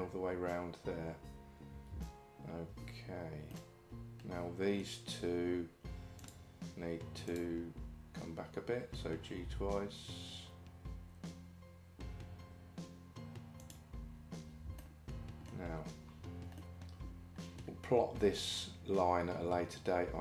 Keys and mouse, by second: 3.6-4.8 middle drag, 9.4 g, 14.8 middle click, 16.6-17.6 middle drag.